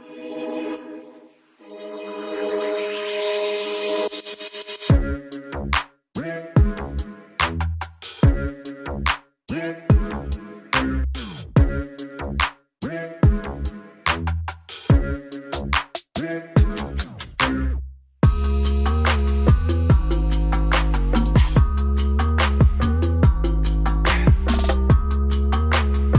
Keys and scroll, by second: 1.6 alt+space, 3.5 alt+space, 4.3 alt+space, 9.8 Return, 12.4 ctrl+alt+shift+e, 14.9 alt+space, 15.6 alt+space, 18.3 ].